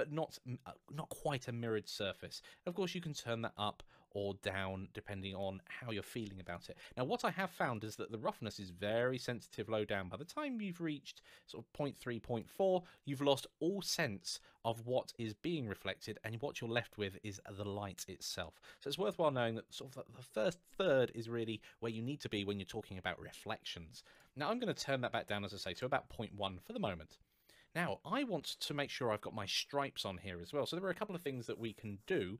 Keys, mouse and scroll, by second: 1.9 click, 6.2 click, 8.1 click, 13.4 middle click, 15.8-16.7 scroll down 1, 17.2 middle click, 19.5 click, 23.9 click, 25.3 KP_1, 25.5 Return, 27.8 scroll up 1.